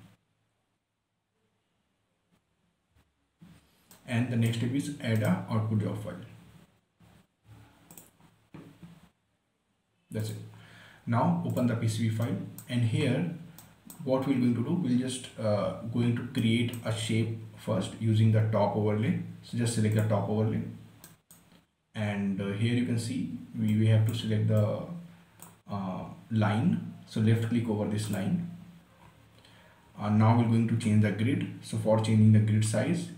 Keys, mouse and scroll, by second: 4.2 right click, 8.3 click, 10.6 click, 12.6-15.2 right drag, 15.2-15.6 scroll up 1, 15.6 scroll down 1, 16.7-19.6 right drag, 20.3 click, 21.4 right click, 24.0-28.0 drag, 28.4 click, 29.4 scroll up 1, 29.8 scroll down 1, 30.4 scroll up 1.